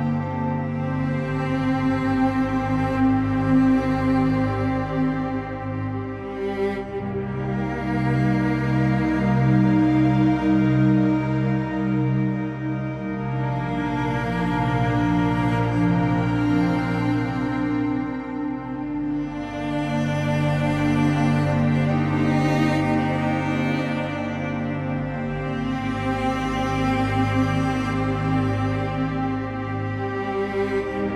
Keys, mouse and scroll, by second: 0.0 click, 0.4 middle click, 0.8 g, 1.5 click, 1.7 KP_0, 2.2 z, 4.5 z, 5.8 click, 6.9 KP_0, 7.7 z, 8.6 scroll down 1, 9.6-10.5 scroll down 3, 10.5 click, 12.4 click, 22.2 click, 25.8-27.9 drag, 27.9-31.1 middle drag.